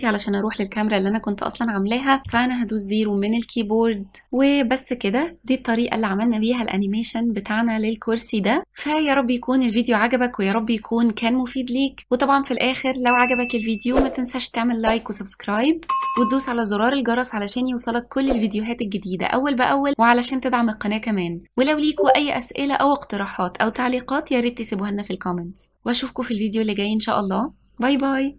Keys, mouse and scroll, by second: 2.4 KP_0, 4.2-11.3 typing, 4.6 drag, 4.8 middle drag, 5.6 click, 7.6 click, 8.2 shift+middle drag, 8.4 click, 8.9 shift+middle click, 9.1 click, 9.2 middle click, 9.6 click, 9.6 shift+middle click, 10.2 Tab, 10.3 click, 10.4 middle click, 10.5 click, 11.2 click, 11.7 Tab, 11.8 ctrl+b, 12.1 click, 12.2 scroll down 4, 12.5 Tab, 12.6 e, 12.8 KP_0, 12.9 drag, 12.9 right drag, 13.1 ctrl+s, 13.4 click, 13.4 space, 13.6 space, 13.7 ctrl+s, 13.8 ctrl+s, 13.8 click, 15.4 click, 15.6-16.6 typing, 16.2 click, 16.5 click, 18.8-28.1 typing, 19.1 middle click, 19.7 click, 19.7 middle click, 20.0 middle drag, 20.1 scroll up 2, 20.2 middle click, 20.4 click, 20.4 middle click, 20.5 scroll down 1, 20.6 ctrl+s, 20.7 middle click, 21.0 middle click, 21.3 click, 22.0 ctrl+s, 22.1 click, 24.1 click, 24.7 click, 24.9 middle click, 25.1 click, 25.1 middle click, 25.3 click, 25.5 click, 26.6 click, 27.0 ctrl+z.